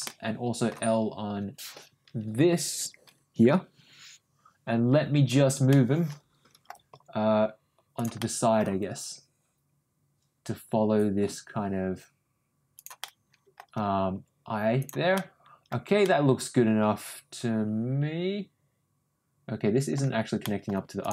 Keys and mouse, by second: 0.0 middle click, 3.5 l, 5.7 middle click, 6.9 g, 8.2 middle click, 8.7 g, 13.0 middle click, 14.1 g, 15.1 middle click, 16.0-19.9 middle drag, 20.4 middle click, 21.0 click.